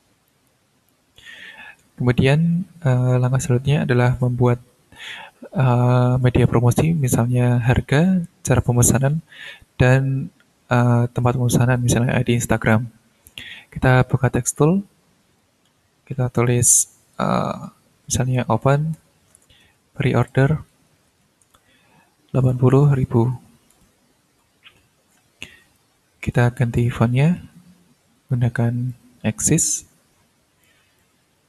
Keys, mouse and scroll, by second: 0.2-1.1 drag, 14.2 click, 14.5 middle click, 15.0-15.6 ctrl+scroll up 2, 15.6 ctrl+middle click, 16.3 click, 18.1-23.4 typing, 23.9 ctrl+scroll up 2, 24.3 ctrl+scroll down 1, 24.7 ctrl+middle click, 25.7 ctrl+click, 26.7 ctrl+click, 27.0 ctrl+a, 28.9-30.8 drag, 31.0 click.